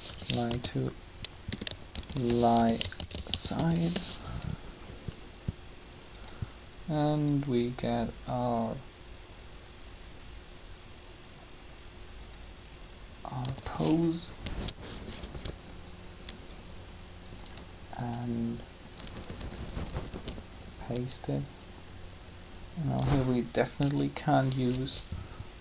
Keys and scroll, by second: 0.4 shift+s, 1.5-4.0 typing, 13.4 typing, 15.2 Down, 16.4 Down, 19.1 Up, 23.8 b.